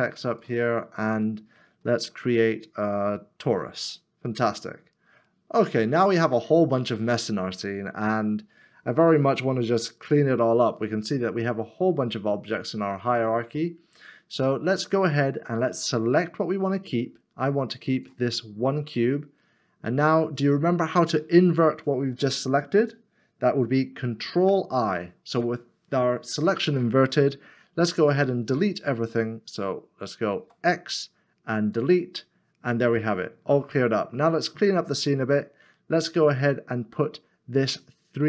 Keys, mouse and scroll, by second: 1.9 shift+a, 4.7-5.5 scroll down 1, 6.1 middle click, 8.0 scroll up 1, 24.5 ctrl+i, 30.4 x.